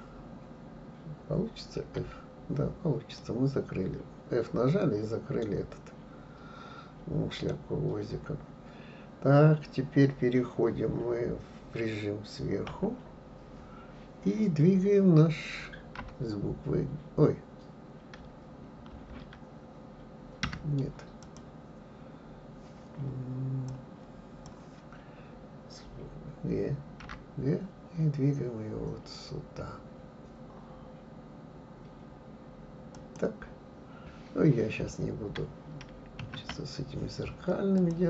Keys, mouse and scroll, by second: 3.2-6.2 middle drag, 7.8-10.6 scroll down 2, 10.6-11.0 scroll down 1, 12.7 KP_7, 21.2 click, 23.7-26.7 drag, 27.0 g, 36.3 ctrl+s.